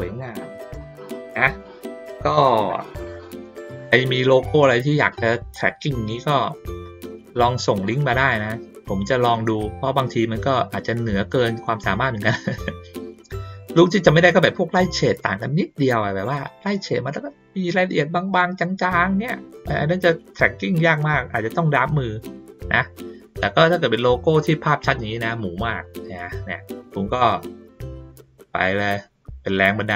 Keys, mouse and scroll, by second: 0.5-1.6 middle drag, 25.8 ctrl+scroll up 1, 26.2 ctrl+middle click, 26.6 ctrl+middle click.